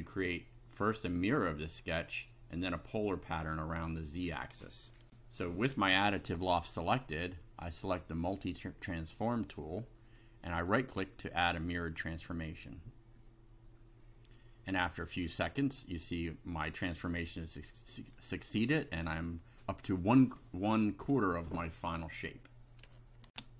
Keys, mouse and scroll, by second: 5.0 ctrl+r, 8.4 click, 10.6 right click, 11.7 click, 15.3-18.2 middle drag, 18.6 middle click, 23.3 ctrl+r.